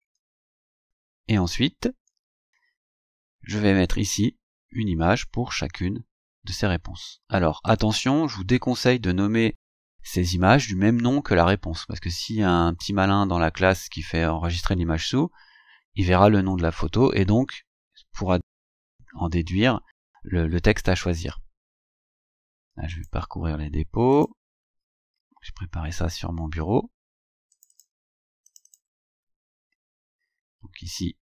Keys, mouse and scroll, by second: 0.0-0.9 typing, 2.1-2.4 scroll up 2, 2.8-3.1 scroll up 2, 7.7 click, 23.0 click, 24.2 click, 27.6 click, 28.6 click.